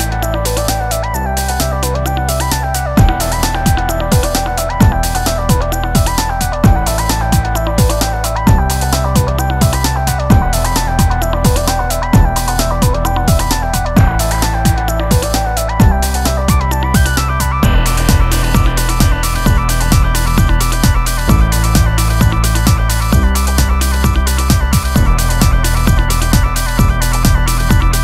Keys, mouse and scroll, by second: 1.0 shift+a, 11.0 shift+a, 14.2 a, 14.4 b, 15.4 g, 17.4-18.0 drag.